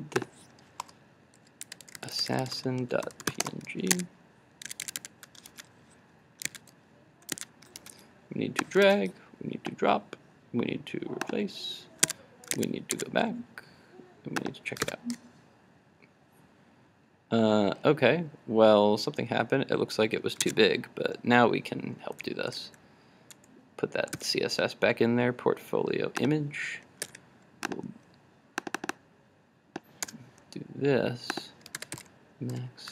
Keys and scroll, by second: 4.0 super+Tab, 14.8 super+r, 20.5 super+Tab, 22.6 super+z, 24.2 super+s, 27.2 super+z, 27.7 super+z.